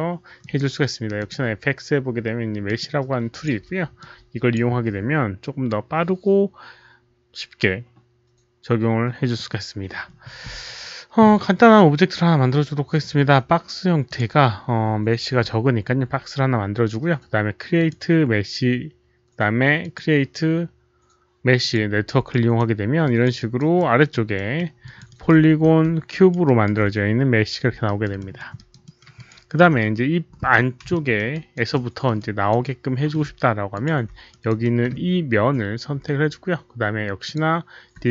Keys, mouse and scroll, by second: 0.3 alt+click, 0.3 alt+right click, 0.5 alt+right click, 1.1 click, 1.2 alt+right click, 2.6 click, 2.7 alt+right click, 3.2 click, 3.9-4.5 drag, 6.1 click, 11.2 click, 13.4 click, 14.0 click, 17.7 click, 19.7 click, 21.5 click, 22.2 alt+right click, 23.1 alt+click, 23.3 alt+right click, 23.7 alt+middle click, 24.0 alt+click, 24.3 alt+middle click, 24.8 alt+click, 25.0 alt+right click, 25.2 alt+middle click, 25.5 4, 26.0 alt+click, 26.4 alt+right click, 26.5 alt+middle click, 26.5 4, 27.8 alt+4, 27.8 alt+right click, 27.8 alt+click, 28.1 alt+middle click, 28.3 alt+scroll down 1, 28.5 alt+right click, 28.5 alt+click, 28.5 4, 28.8 alt+middle click, 29.1 alt+click, 29.3 alt+right click, 29.8 5, 30.4 6, 30.9 alt+middle click, 31.2 alt+right click, 31.7-32.0 alt+middle drag, 32.1-32.4 alt+right drag, 32.6 alt+middle click, 33.7 alt+click, 34.2 alt+right click, 34.6 alt+middle click, 36.9-37.7 typing, 37.2 ctrl+click, 37.3 alt+middle click, 37.3 alt+right click.